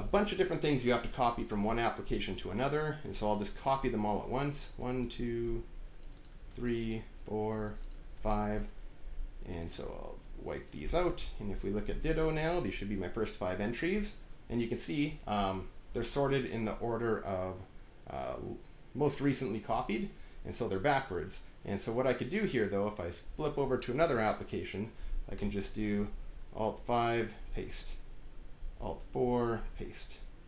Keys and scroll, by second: 0.0 Return, 3.5 ctrl+c, 4.5 ctrl+c, 5.2 ctrl+c, 6.2 ctrl+c, 6.9 ctrl+c, 7.9 ctrl+c, 11.1 Delete, 12.2 alt+`, 25.2 Return, 26.6 alt+5, 27.3 ctrl+v, 28.6 alt+`, 29.1 alt+4, 29.6 ctrl+v.